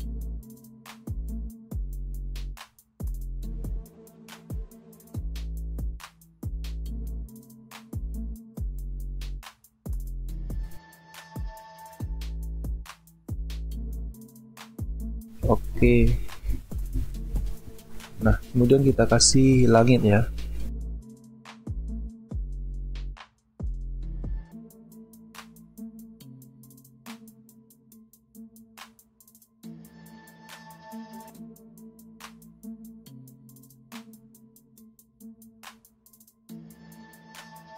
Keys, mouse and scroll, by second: 0.6 ctrl+t, 1.3 alt+scroll up 1, 2.2 space, 3.4 alt+scroll up 1, 4.9 ctrl+click, 9.4 alt+scroll down 1, 12.1 ctrl+click, 15.8 ctrl+e, 16.6 alt+scroll down 1, 17.4-17.9 alt+scroll down 1, 17.9 alt+scroll up 1, 37.5 ctrl+t.